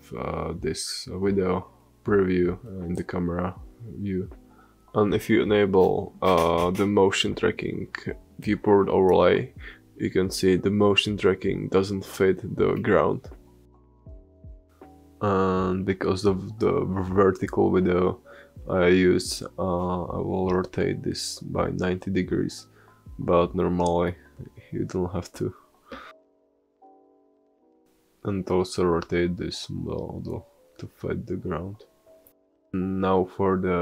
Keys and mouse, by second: 0.0 click, 0.3 space, 4.9-5.7 drag, 5.7 middle click, 5.8-8.1 drag, 8.1-11.2 middle drag, 12.0-12.4 middle drag, 13.1 r, 17.9 middle click, 18.5-20.4 drag, 19.0 r, 29.8-31.8 middle drag, 30.9 g.